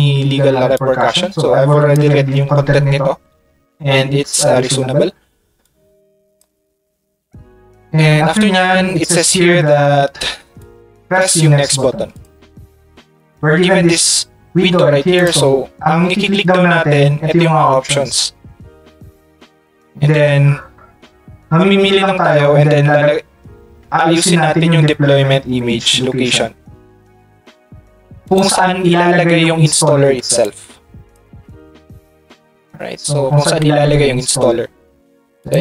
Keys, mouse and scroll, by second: 0.7-1.9 drag, 5.6 click, 12.1 click, 28.2 ctrl+click, 30.4-31.4 ctrl+shift+drag, 31.1 ctrl+shift+right click, 35.4 click.